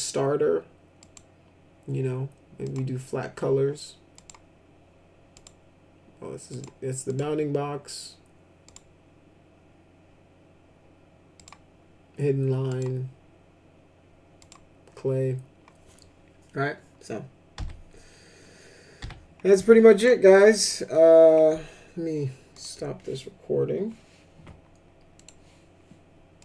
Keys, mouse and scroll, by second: 1.0 click, 2.6 click, 4.1 click, 5.3 click, 6.4 click, 7.1 click, 8.6 click, 11.3 click, 12.6 click, 14.4 click, 17.5 F4, 19.0 F4, 19.9 click, 22.5 click.